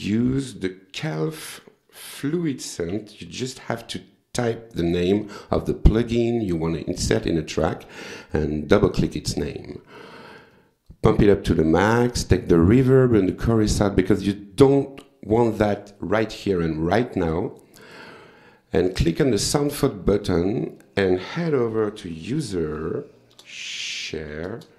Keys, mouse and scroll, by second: 1.0 v, 2.2-4.1 typing, 6.7 click, 8.3 click, 10.6 click, 12.1 click, 12.9 click, 13.7 click, 17.8 click, 20.2 click, 20.8 click, 21.6-24.7 typing, 23.4 Return.